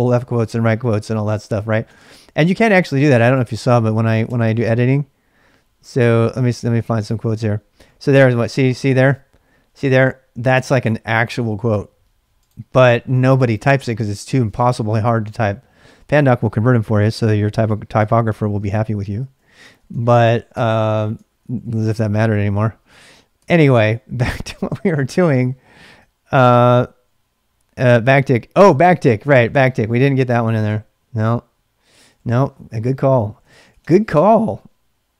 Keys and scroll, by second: 1.7-5.7 typing, 2.9 ctrl+[, 2.9 ctrl+j, 6.8-8.8 typing, 14.5 ctrl+[, 14.5 ctrl+j, 15.5 k, 15.9 j, 17.0 ctrl+[, 17.1 k, 18.0 shift+z, 18.3 shift+z, 19.7 ctrl+[, 19.8 k, 20.5 k, 21.3 ctrl+a, 21.6 ctrl+a, 23.3 ctrl+c, 24.8 ctrl+a, 24.9 ctrl+a, 28.0 ctrl+c, 31.6-34.3 typing.